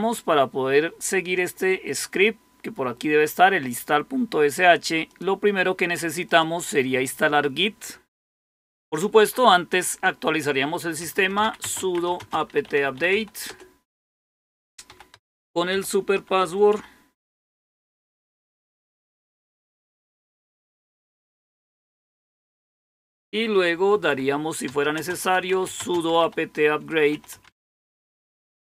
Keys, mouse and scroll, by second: 0.5-1.7 scroll down 1, 1.7-2.5 scroll up 1, 2.5-3.0 scroll up 1, 5.0 click, 6.2 click, 10.8-17.7 typing, 23.6-28.2 typing.